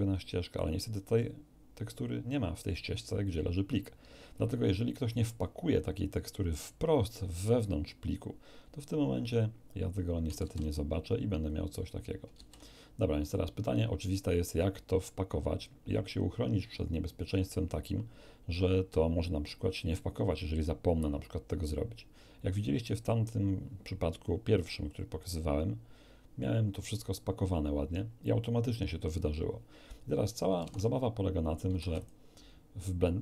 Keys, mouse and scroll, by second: 10.4 shift+z, 11.6 scroll up 2, 12.3 shift+z, 25.2 click, 30.9 alt+Tab, 31.7 ctrl+q, 31.9 ctrl+click.